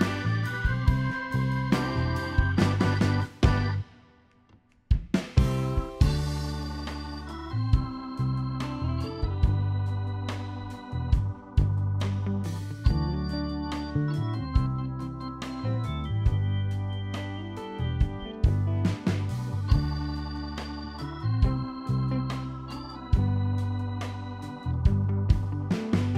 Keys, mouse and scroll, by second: 0.1 scroll up 1, 0.7 click, 1.7 middle click, 2.3 s, 2.7 middle click, 3.4 ctrl+click, 3.9 middle click, 4.4 click, 5.5 middle click, 5.5 ctrl+click, 6.0 middle click, 6.7 click, 7.5 ctrl+click, 8.0 middle click, 9.3 click, 9.7 click, 10.6-11.0 scroll down 2, 10.7 middle click, 11.9 middle click, 14.1 click, 14.9 click, 16.1 middle click, 17.0 g, 17.9 middle click, 19.1 ctrl+r, 20.4 ctrl+click, 20.9 middle click, 21.5 ctrl+r, 22.8 middle click, 23.7 ctrl+click, 24.3 middle click, 24.6-25.0 scroll up 4, 24.8 middle click, 25.2 g.